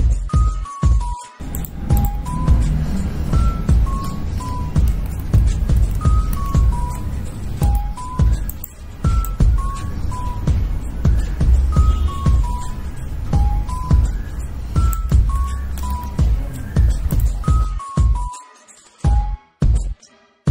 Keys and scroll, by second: 6.2 ctrl+z, 6.7 ctrl+z, 7.2 ctrl+z, 17.0 ctrl+alt+z, 20.4 ctrl+alt+z.